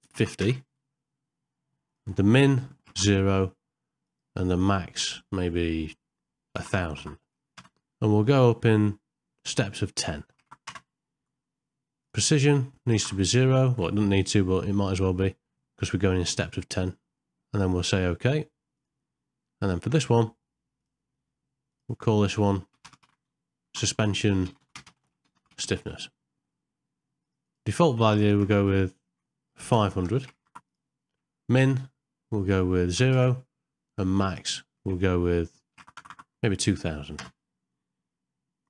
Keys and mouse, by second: 6.7 KP_0, 20.8-38.6 drag, 28.4 KP_0, 29.9 BackSpace, 30.4 KP_0, 36.0 KP_0.